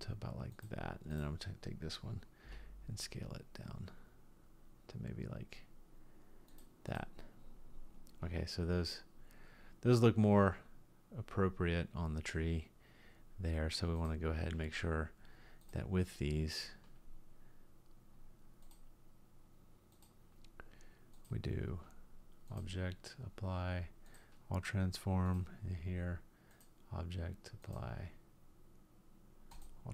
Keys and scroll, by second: 2.4 s.